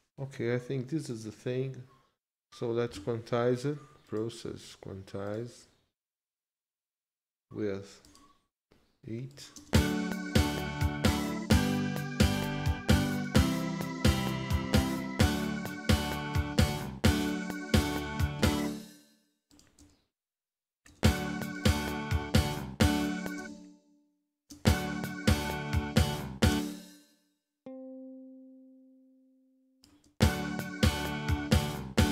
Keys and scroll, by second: 9.6 space, 18.6 space, 20.9 space, 23.4 space, 26.5 space, 30.1 space.